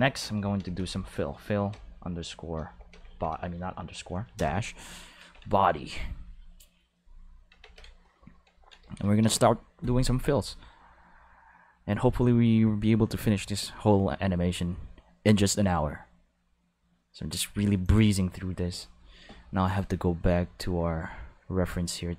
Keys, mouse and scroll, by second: 0.0-4.1 typing, 4.4 Return, 5.2 ctrl+s, 6.1 click, 6.3 click, 7.0 click, 7.6 ctrl+s, 9.2 ctrl+s, 17.8 click, 19.7 click.